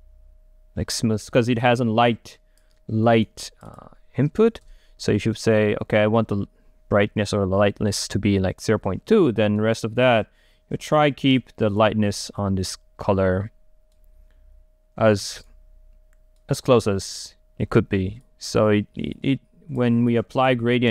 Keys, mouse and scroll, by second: 1.9 middle click, 2.4 click, 3.1 right click, 3.5-4.7 drag, 4.7 Return, 5.5-9.7 right drag, 14.7-18.4 right drag, 18.4-20.9 drag.